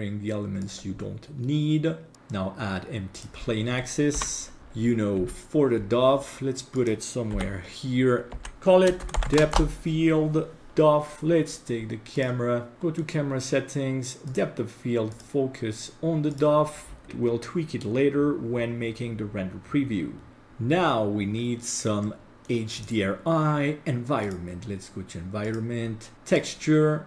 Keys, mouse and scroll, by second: 0.6 click, 1.0 scroll down 2, 2.1-3.3 drag, 4.2 KP_3, 4.6-5.2 scroll up 4, 5.2 g, 7.3 KP_7, 8.3 g, 8.5 F2, 12.1 click, 12.7 middle click, 14.3 click, 15.1-16.4 drag, 22.1-22.4 middle drag, 22.8 scroll down 2, 24.2 click, 25.5 click.